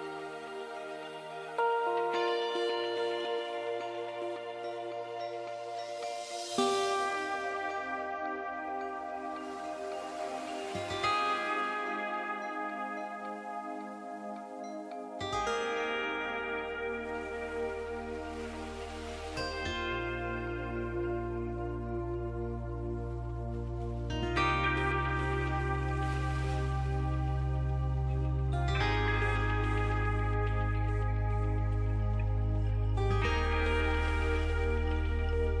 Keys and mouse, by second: 1.6 e, 2.5 e, 4.5 e, 5.3 e, 6.5 e, 12.9 e, 14.8 e, 19.9 e, 22.1 e, 24.3 e, 26.3 e, 30.8 e, 32.8 e.